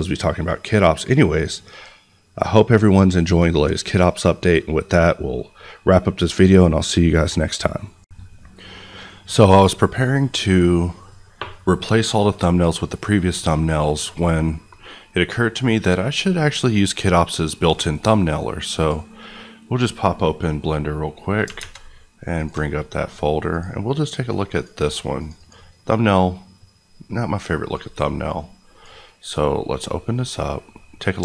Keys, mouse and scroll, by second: 8.0 click, 18.7 click, 21.5 alt+Tab, 22.3 alt+click, 25.3 click, 27.6 click, 30.7 scroll up 1, 30.8 middle click.